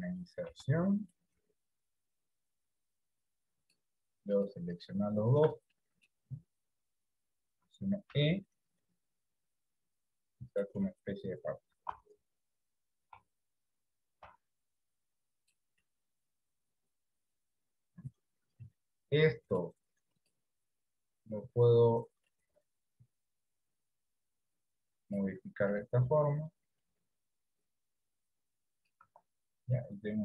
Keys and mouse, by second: 6.1 middle click, 6.9 KP_1, 8.4 e, 12.1 s, 14.5 s, 16.1-17.6 middle drag, 24.5 click, 26.8 click, 28.6 click, 29.3 Tab, 30.0-30.2 middle drag.